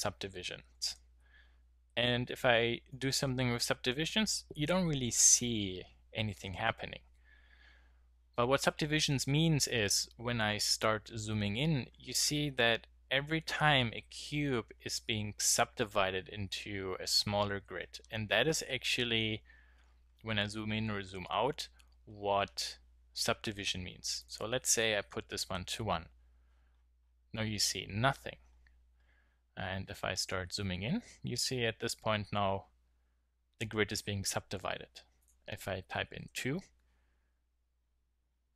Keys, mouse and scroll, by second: 1.4 middle click, 1.5 middle click, 3.7 middle click, 6.4 KP_7, 10.4-12.8 middle drag, 17.8-19.5 middle drag, 24.2-25.7 drag, 25.7 middle click, 26.7-35.0 middle drag, 35.2-36.7 drag, 36.8 drag, 37.0 middle click.